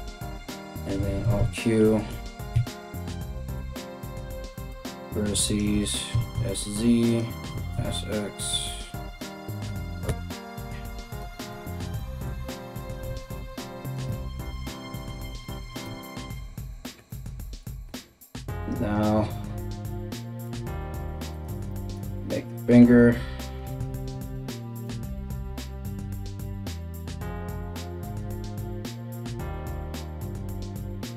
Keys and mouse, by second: 0.7 alt+q, 2.1 1, 2.6 right click, 3.2 x, 5.1 alt+right click, 5.7-26.3 middle drag, 5.7 s, 7.1 s, 12.6 s, 15.5 KP_1, 17.5 3, 18.2 right click, 18.6 shift+right click, 19.2 KP_1, 20.1 r, 23.4 2, 23.9 alt+right click, 24.5-27.1 typing, 26.3 right click, 26.4 shift+middle click, 26.5 right click, 26.8 middle click, 27.6 alt+right click, 27.7 alt+shift+middle click, 27.8 right click, 27.8 middle click, 28.3-30.2 typing, 28.6 alt+right click, 28.7-31.1 middle drag.